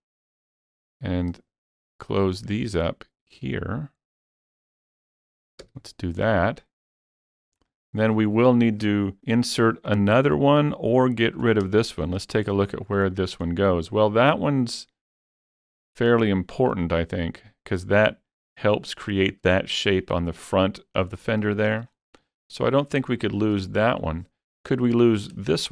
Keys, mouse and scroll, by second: 0.0 click, 0.9 click, 1.7 shift+click, 2.4 shift+click, 3.6 shift+click, 4.3 shift+click, 5.6 f, 6.2-7.8 middle drag, 7.6 scroll down 4, 8.4 middle click, 9.2 alt+a, 10.0-10.3 scroll up 2, 10.9 alt+click, 11.5-12.0 alt+scroll down 3, 11.8-13.0 shift+middle drag, 13.1 shift+middle click, 21.3 shift+middle click, 21.9 shift+scroll up 3, 22.3 middle click, 22.8 scroll up 3, 23.2-25.1 shift+middle drag, 24.0 shift+middle click, 24.8 alt+click, 25.1-25.7 alt+scroll down 3, 25.5 shift+middle click.